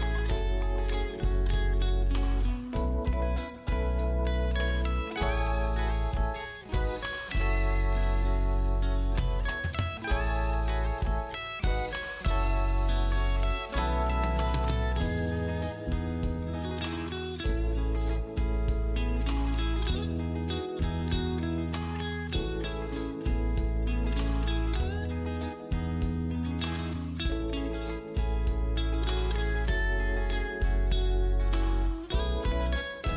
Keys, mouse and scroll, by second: 1.6 ctrl+space, 1.8-3.1 scroll down 1, 3.5 click, 5.2-5.9 scroll up 1, 5.9 click, 7.9-9.1 scroll up 1, 9.1 click, 13.6 right click, 14.7 click, 15.9-16.5 scroll up 1, 16.5 click, 17.4 ctrl+click, 18.3 ctrl+space, 19.1 click, 19.6 ctrl+click, 20.1 click, 20.7 ctrl+z, 21.0 ctrl+click, 23.4 scroll up 1, 23.8 click, 25.7 right click, 26.8 click, 28.0 right click, 28.6 click, 30.4 g, 31.4 click.